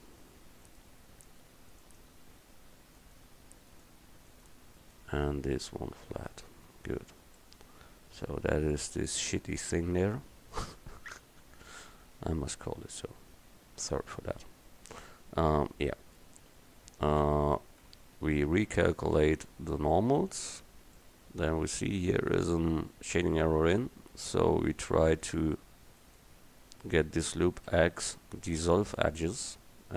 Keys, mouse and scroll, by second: 0.1 middle click, 0.7-2.1 middle drag, 6.3-6.8 drag, 6.7 Tab, 6.9-7.5 middle drag, 7.7 middle click, 9.5 Tab, 17.3 a, 17.9 a, 18.9-21.0 drag, 20.2 Tab, 23.1 Tab, 24.8-26.1 drag, 26.1 right click, 27.7 x.